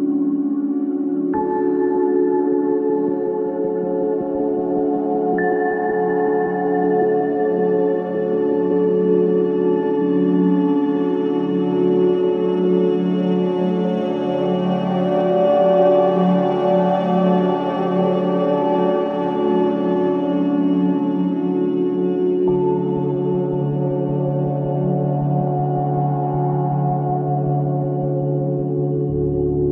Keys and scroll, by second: 8.8 ctrl+shift+[, 17.6 v, 21.8 space, 22.9 3, 24.1 ], 24.6 KP_3.